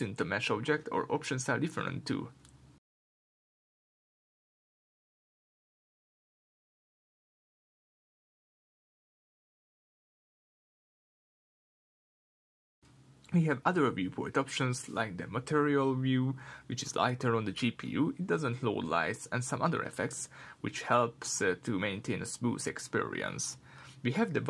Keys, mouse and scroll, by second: 4.2-4.6 scroll down 2, 4.6 g, 5.2 click, 6.1-8.6 drag, 11.0 r, 11.7 click, 12.7-18.3 middle drag, 18.3 click, 20.0-23.2 middle drag, 23.2 click, 23.9-24.4 middle drag, 24.2-24.4 scroll up 2.